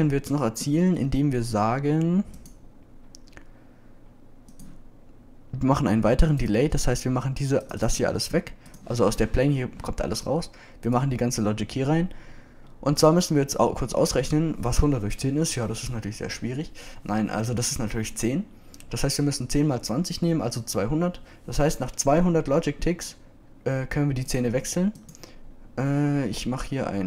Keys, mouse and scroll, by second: 6.9-7.2 drag, 7.4 right click, 11.8 click, 11.9 click, 25.9-26.5 drag.